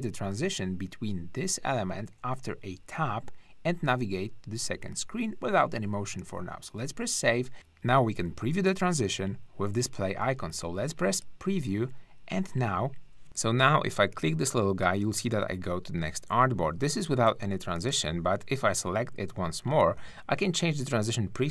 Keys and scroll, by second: 7.5 `.